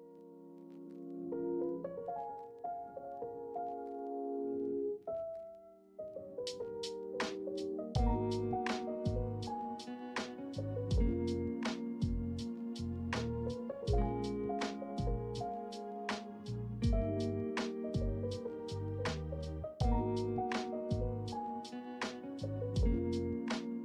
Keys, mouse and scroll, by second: 0.4 e, 1.1 z, 3.1 middle click, 4.2 shift+middle click, 4.7 middle click, 6.7 e, 7.2 z, 9.4 middle click, 11.5 shift+middle click, 12.2 ctrl+middle click, 12.8 shift+click, 13.8 a, 15.7 ctrl+b, 22.0 middle click.